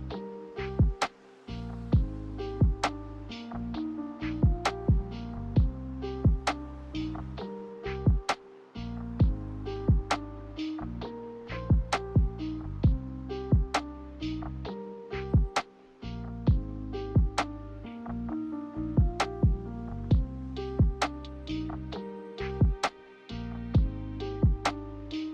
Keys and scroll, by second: 6.3 m, 7.7 b, 9.2 a, 9.9 b, 10.8 Delete, 11.6 m, 22.9 a.